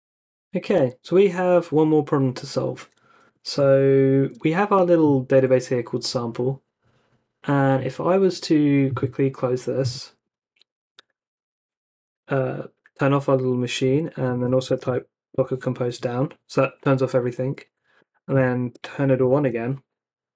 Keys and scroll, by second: 3.4 super+Tab, 10.7 ctrl+c, 13.8 Up, 14.2-15.3 typing, 17.6 Up, 18.0-19.6 typing.